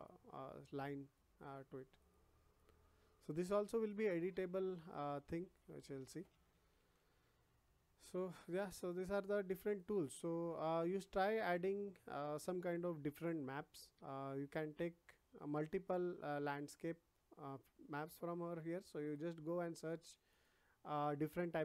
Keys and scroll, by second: 5.9 ctrl+z.